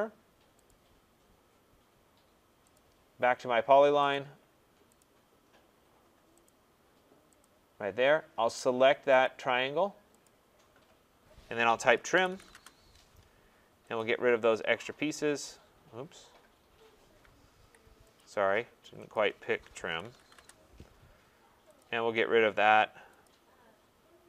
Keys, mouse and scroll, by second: 0.7 click, 2.5 scroll, 2.7 click, 4.1 click, 5.0 click, 6.5 click, 7.4 click, 9.2 click, 10.2 click, 12.1 typing, 12.5 Return, 13.9 typing, 14.0 click, 15.1-15.9 typing, 17.6 Escape, 18.2 click, 19.1 click, 19.9 typing, 20.3 Return, 21.8 click, 23.2 click.